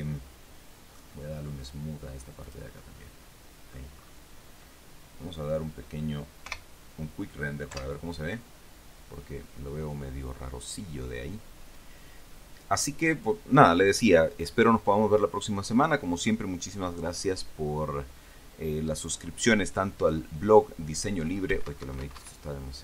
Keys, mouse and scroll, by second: 2.8 click, 3.3 middle click, 4.3 scroll up 1, 6.8 KP_0, 8.0 F12, 21.8 Escape.